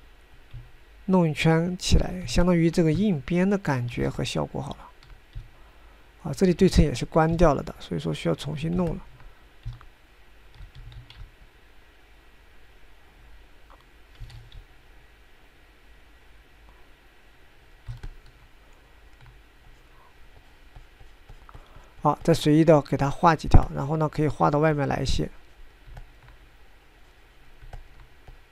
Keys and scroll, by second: 0.9 ctrl+z, 1.4 f, 12.6 ctrl+z, 16.0 ctrl+z.